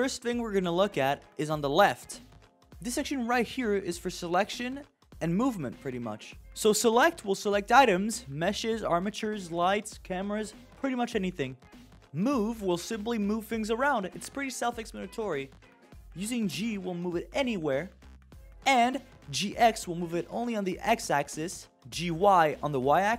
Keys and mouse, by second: 7.0 click, 8.5-8.8 drag, 9.3 click, 10.2 click, 12.4 click, 15.2 click, 15.5 click, 17.4 g, 19.1 ctrl+z, 20.1 g, 23.0 g.